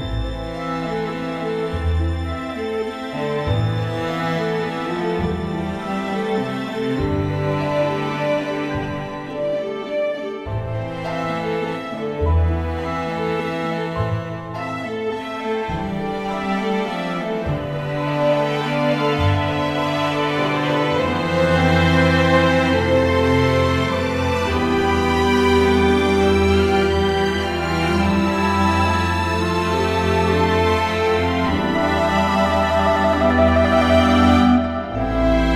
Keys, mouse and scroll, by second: 0.3 s, 1.6 Tab, 2.8 Tab, 5.1 a, 16.8 middle click, 17.2 middle click, 17.4-18.8 middle drag, 22.0 middle click, 22.8-24.6 middle drag, 33.5 KP_1.